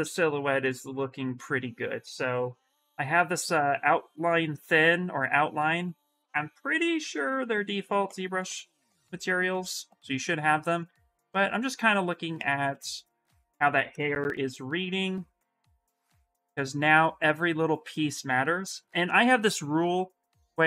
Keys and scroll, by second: 13.9 shift+s, 15.9 shift+s.